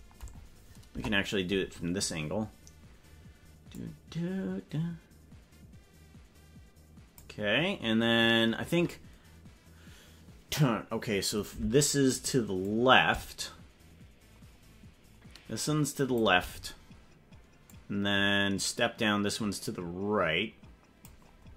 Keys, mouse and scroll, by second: 0.3 scroll down 4, 0.9 KP_0, 3.7-5.2 drag, 6.9 click, 12.6-16.1 drag, 17.6 click, 19.8-21.0 drag.